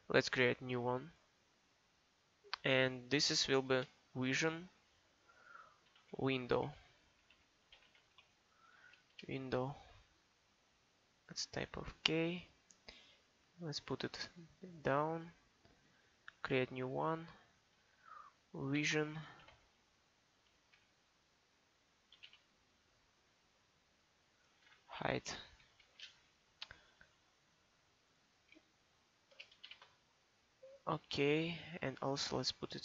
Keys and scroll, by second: 4.2 shift+v, 5.9-9.1 typing, 18.8 shift+v, 19.4 shift+-, 20.5 h, 22.2 g, 22.3 h, 25.5 t, 29.3 BackSpace, 29.7 shift+h.